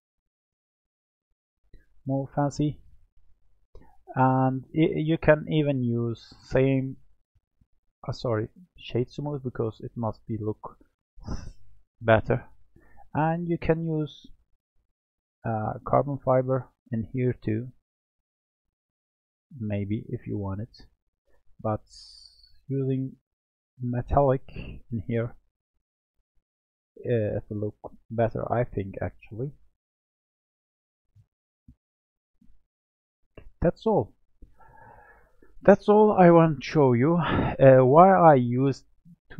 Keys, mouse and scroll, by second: 0.0 click, 0.4-2.0 middle drag, 2.0-3.2 scroll up 4, 3.2-4.9 shift+middle drag, 4.9-6.2 scroll up 12, 6.2 click, 7.6-10.9 right drag, 10.9 drag, 11.5 click, 12.0 drag, 12.8 click, 14.5 click, 18.9 click, 20.1-20.5 scroll down 2, 20.5-21.2 middle drag, 21.2-21.6 scroll down 5, 21.9-22.3 scroll down 5, 22.3-25.8 middle drag, 25.8-26.9 scroll up 6, 28.5-31.6 drag, 32.1 click, 32.7-33.2 scroll down 3, 33.2-36.3 middle drag.